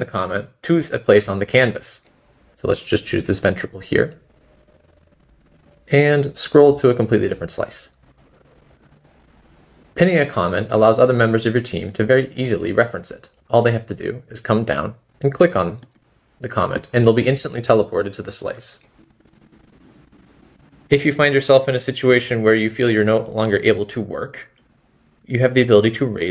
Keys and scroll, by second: 6.5 typing, 9.1-9.9 typing, 11.3-12.0 typing, 17.8-18.7 typing, 19.8-20.5 typing.